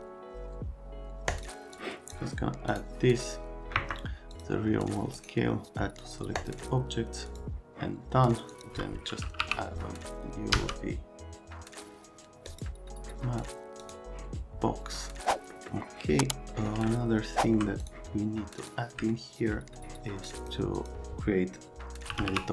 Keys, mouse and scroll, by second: 1.3 click, 1.8 click, 3.8 Escape, 4.3 click, 5.2 right click, 6.4 click, 7.3 click, 8.5 click, 9.4 t, 10.5 v, 12.4 click, 13.8 click, 15.5 middle click, 16.9 alt+middle click, 17.8 click, 18.6 click, 19.1 alt+middle click, 20.4 click, 20.8 click, 21.8-22.5 typing.